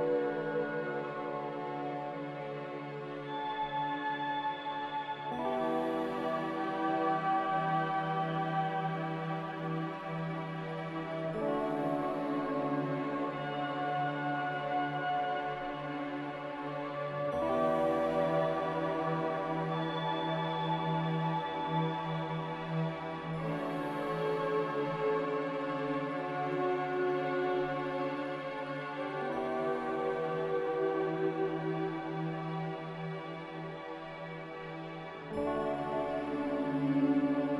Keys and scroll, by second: 0.8 a, 6.9 x, 14.9 x, 16.5 s, 17.5 h.